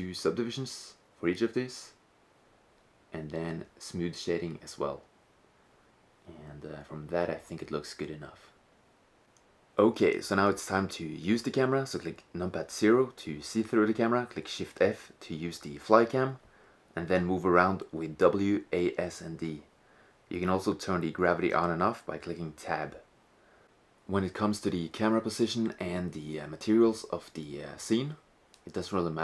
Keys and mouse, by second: 3.3-5.2 drag, 5.3-6.9 right drag, 6.9-8.8 drag, 8.4-8.8 right drag, 8.7-10.1 middle drag, 10.6 KP_0, 13.6 shift+f, 25.7 shift+z, 28.4-29.2 middle drag.